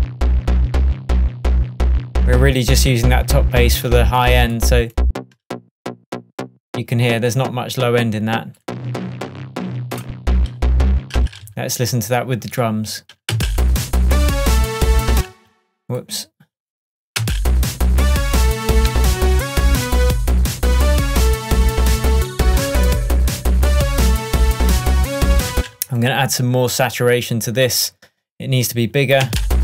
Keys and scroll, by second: 13.4 space, 15.2 space, 17.2 space, 25.6 space, 29.3 space.